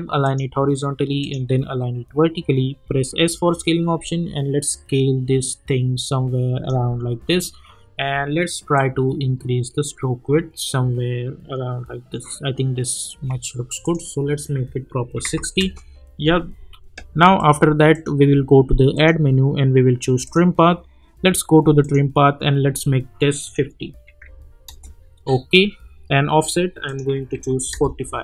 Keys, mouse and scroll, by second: 2.8 s, 3.9-6.7 drag, 9.0-13.1 drag, 15.5 Return, 17.4 click, 24.6 Return, 26.8 click, 27.7 Return.